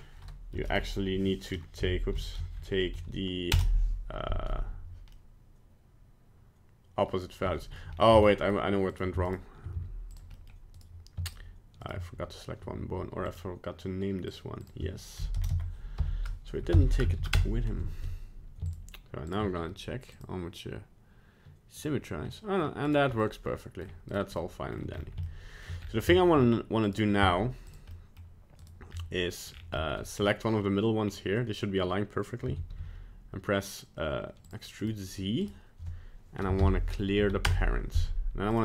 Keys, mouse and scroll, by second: 5.1 middle click, 7.9 scroll down 2, 8.3 middle click, 8.9 right click, 9.2 shift+right click, 9.7 x, 10.3 middle click, 10.7 right click, 11.3 shift+right click, 11.9 right click, 13.3 right click, 14.3 click, 15.5 BackSpace, 18.7 shift+right click, 19.3 shift+right click, 20.1 click, 22.3 middle click, 22.9 right click, 23.2 middle click, 24.1 right click, 24.4 middle click, 24.9 scroll up 3, 25.2 shift+middle click, 25.8 scroll up 2, 26.1 shift+middle click, 26.8 right click, 27.2 z, 27.9 middle click, 28.6 right click, 28.9 scroll up 2, 29.5 scroll down 3, 29.8 middle click, 30.1-30.5 scroll up 2, 31.0-31.6 scroll down 1, 32.4 e, 34.8 right click, 35.4 right click, 36.6 alt+p, 38.5 right click.